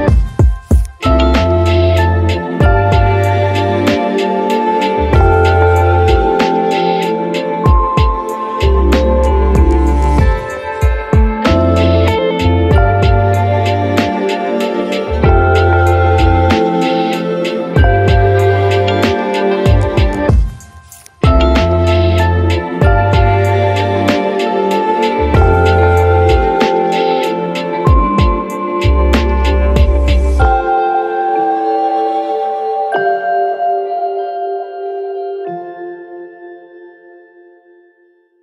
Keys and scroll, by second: 4.2 1, 6.2 ctrl+1, 7.8 ctrl+d, 12.0 Delete, 12.6 ctrl+z, 13.4 Delete, 20.7 ctrl+z, 27.3 ctrl+z, 34.5 ctrl+z, 35.3 ctrl+z, 37.5 1.